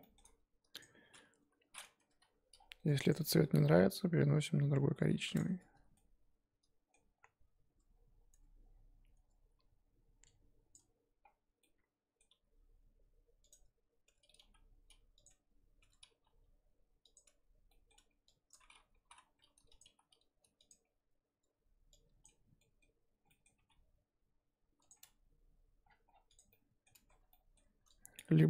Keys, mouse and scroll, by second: 0.0 shift+middle click, 0.2 scroll up 3, 0.8 click, 1.0-2.0 scroll up 1, 2.0 Tab, 2.2 a, 3.1 click, 3.5 g, 5.5 Tab, 5.9-7.2 middle drag, 7.2-7.7 scroll up 4, 7.7 Tab, 8.0 scroll up 2, 8.3 Tab, 9.1 Tab, 9.8-10.2 scroll up 1, 10.7 click, 12.3 g, 13.5 Tab, 14.1 Tab, 14.4 g, 15.3 Tab, 15.8 Tab, 16.1 g, 17.2 Tab, 18.0 scroll up 1, 18.5 click, 18.9 s, 19.8 g, 20.7 Tab, 21.4 Tab, 22.2 click, 23.6 g, 25.0 Tab, 25.8-26.3 scroll down 6, 26.3 click, 26.5 middle click, 26.9 Tab.